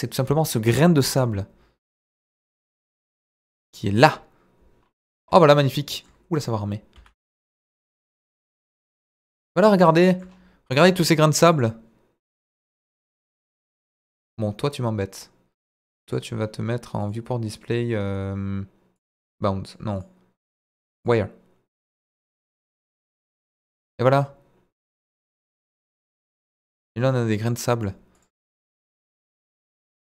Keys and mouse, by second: 0.6 g, 1.1 click, 1.8 click, 3.1-4.3 drag, 6.4 click, 6.9 s, 8.1 click, 8.6 s, 9.2 click, 9.9 shift+middle click, 11.5 click, 12.5 drag, 14.0 click, 17.0 click, 19.0 click, 19.7 click, 20.0-21.1 drag, 23.3-23.8 middle drag, 25.6-27.8 drag, 28.2 click.